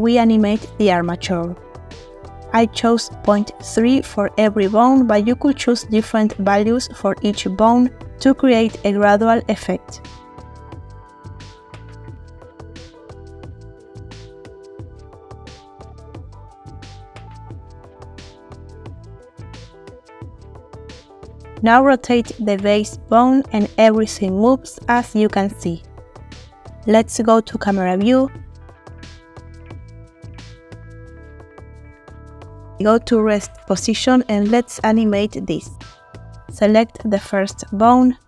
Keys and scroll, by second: 1.8 ., 1.8 3, 2.2 Return, 4.0 ., 4.0 3, 4.5 Return, 6.2 typing, 6.6 Return, 8.6 typing, 9.2 Return, 10.4 typing, 11.0 Return, 13.1-13.5 typing, 14.5 Return, 16.0 3, 16.5 Return, 18.3 3, 18.6 Return, 21.2 3, 21.5 Return, 22.6 r, 32.2 a.